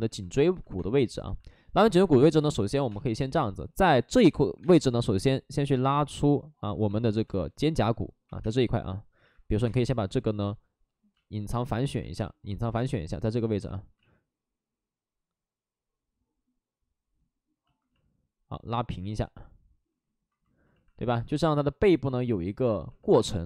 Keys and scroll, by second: 0.7 space, 1.9-4.5 typing, 8.2 2, 9.1 ctrl+z, 9.6 space, 10.0 ctrl+z, 12.6 ctrl+z, 12.7 space, 13.9 ctrl+z, 23.1 space.